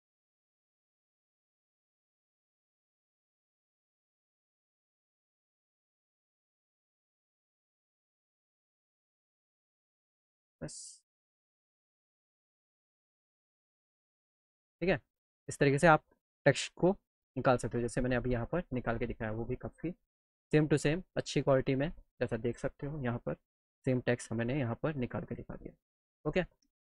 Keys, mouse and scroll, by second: 1.9 click, 4.7 click, 6.2 click, 10.4 click, 11.1 click, 11.5 middle click, 11.9-13.1 alt+drag, 14.1 middle click, 14.4-17.0 middle drag, 17.1 middle click, 17.4 middle click, 17.6 middle click, 17.9-20.1 alt+middle drag, 20.4 middle click.